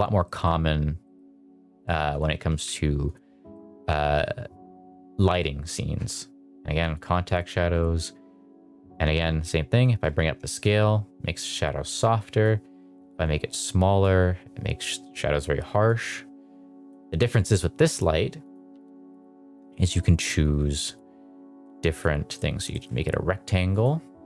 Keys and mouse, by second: 0.1 middle drag, 0.9 middle drag, 2.0 click, 2.4 g, 3.0 click, 3.4 middle drag, 6.7 click, 7.2 click, 7.6 click, 8.8 click, 10.4 shift+middle click, 12.4-13.9 drag, 15.7-16.8 drag, 17.1 click, 18.3 click, 19.0 click, 20.8-21.9 drag, 22.2 middle drag, 22.6 shift+middle drag, 23.6-24.2 drag.